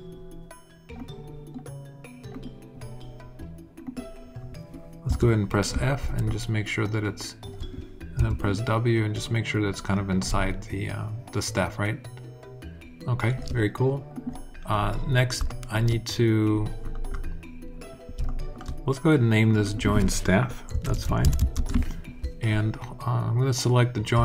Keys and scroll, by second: 4.8 f, 7.9 alt+w, 20.2-21.5 typing.